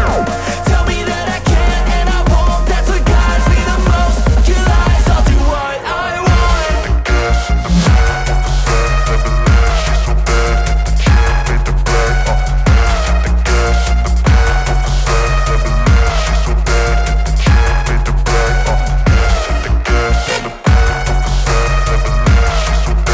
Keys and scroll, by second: 0.0-2.0 typing, 2.3 ctrl+s, 8.2-13.2 typing, 13.8 ctrl+s, 17.7 t, 18.7 h, 19.1 Return, 19.9 /, 20.3 KP_2, 22.9 KP_1, 23.0 KP_1.